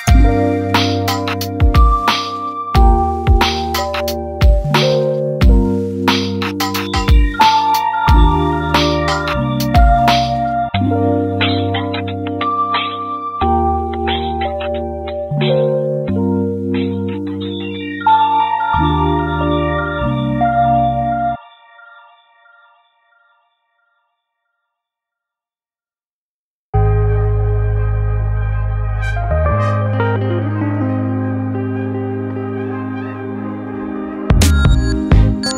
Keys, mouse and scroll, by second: 1.1 click, 1.6 alt+shift+click, 2.0 s, 3.5 KP_1, 4.4 1, 6.7 click, 7.2 g, 10.1-12.0 click, 12.1 g, 13.9 click, 15.9 right click, 16.5 click, 17.2 click, 17.8 right click, 18.1 scroll down 1, 18.6-20.2 shift+middle drag, 20.2 click, 20.7 right click, 21.5 click, 21.9 right click, 22.5 click, 23.3 right click, 23.6-24.8 shift+middle drag, 24.8-25.1 scroll down 3, 25.1-26.4 shift+middle drag, 26.4 click, 26.9 g, 30.3 click, 30.6 KP_7, 31.5 s, 34.6 click, 35.0 g.